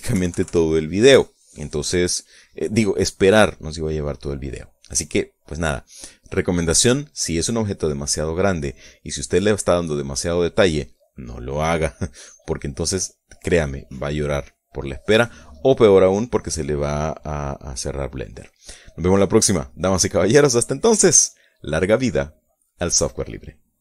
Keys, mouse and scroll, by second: 0.1 shift+scroll up 1, 0.3 shift+middle click, 1.8 KP_Subtract, 2.8-4.7 middle drag, 5.7-6.9 middle drag, 18.5-18.9 scroll up 1, 21.5-23.8 right drag.